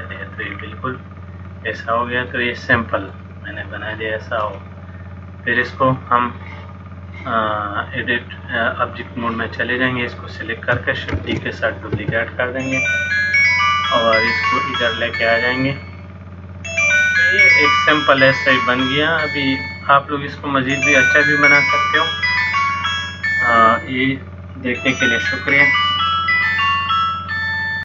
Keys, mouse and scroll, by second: 0.5-0.8 scroll down 4, 1.5 middle click, 3.7 shift+middle click, 8.5 click, 11.3 shift+d, 12.6 middle click, 15.5 click, 18.7 middle click, 20.9 middle click.